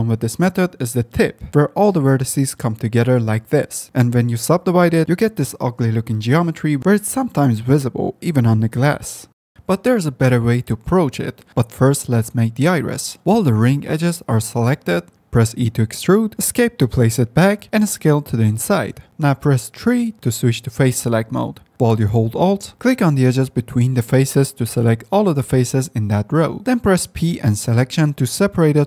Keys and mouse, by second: 3.3 Tab, 3.9 ctrl+2, 4.3 ctrl+3, 6.7 h, 9.5 3, 10.4 2, 13.9 i, 14.5 ctrl+z, 15.0 e, 16.6 s, 22.6 3, 25.5 ctrl+p, 27.5 p.